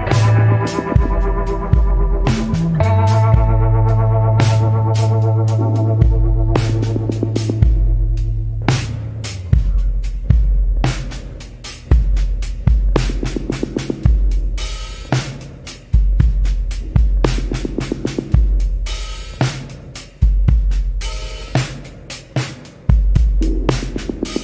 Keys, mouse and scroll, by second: 0.2 scroll down 1, 2.9 scroll down 1, 5.4 scroll up 1, 11.9 scroll up 1.